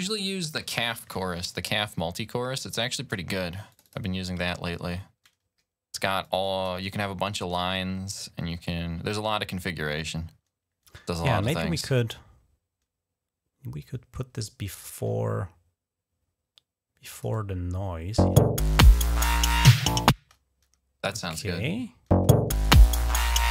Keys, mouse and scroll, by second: 3.5 click, 4.5 click, 6.1 click, 13.6-17.4 drag, 18.1 space, 20.1 space, 21.9 space.